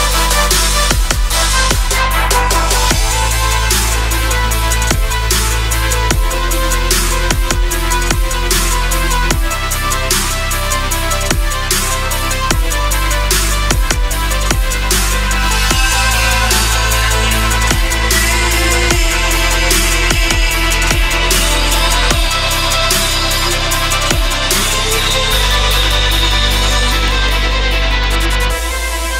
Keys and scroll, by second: 13.1 Delete, 18.0 g.